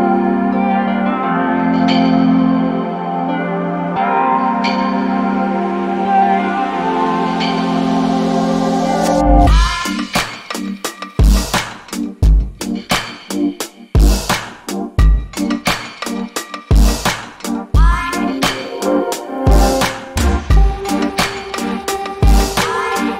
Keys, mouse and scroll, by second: 17.3 alt+middle click, 17.7 alt+click.